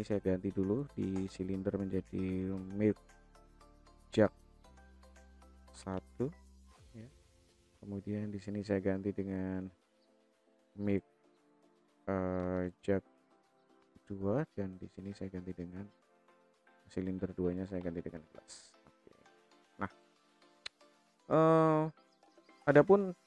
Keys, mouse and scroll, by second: 1.0 click, 1.2-7.3 drag, 8.0 click, 9.4 click, 9.6-14.9 drag, 15.3 click, 16.7 click, 16.8-19.5 drag, 21.4 click.